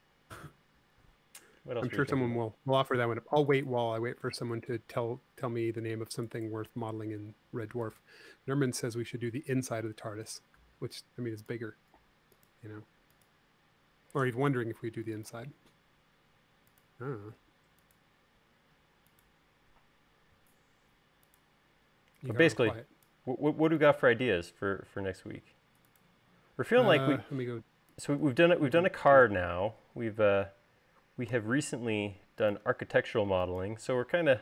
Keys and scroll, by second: 0.3 l, 22.6 e, 34.3 space.